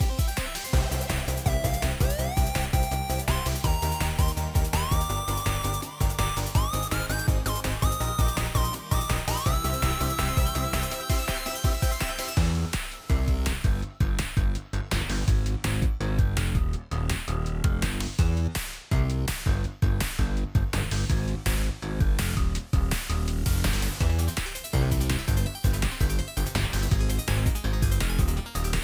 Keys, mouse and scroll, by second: 25.5 ctrl+click.